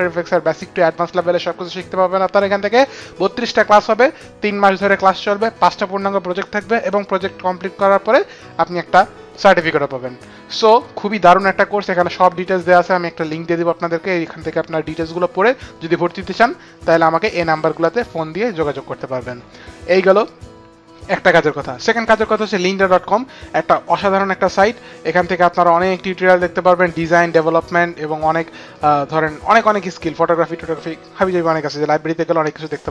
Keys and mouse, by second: 17.1 click, 17.9 click, 24.7 middle click, 28.8 middle click.